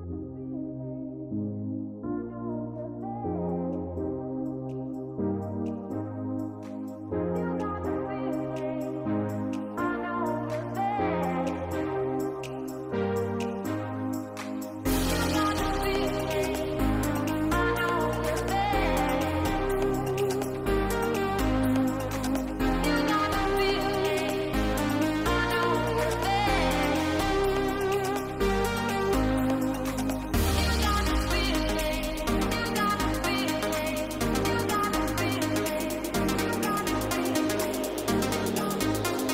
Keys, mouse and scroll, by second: 0.0 click, 2.8 click, 4.1 g, 9.1 click, 12.5-12.9 shift+middle drag, 16.5 shift+middle drag, 17.2 shift+middle drag, 17.5 click, 18.9-19.4 drag, 20.3 click, 21.3 click, 23.0-23.4 middle drag, 23.7 shift+middle click, 24.2 shift+middle click, 26.2 shift+middle drag, 26.6 shift+middle click, 28.4-28.7 middle drag, 29.5 shift+middle click, 30.9-32.0 drag, 32.7 KP_0, 33.7 middle click, 34.3 middle drag, 36.2 click, 37.1 click.